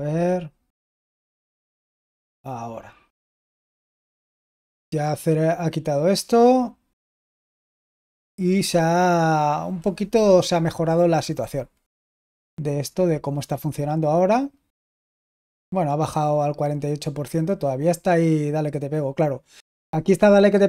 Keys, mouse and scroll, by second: 1.5 super+w, 12.0 super+l.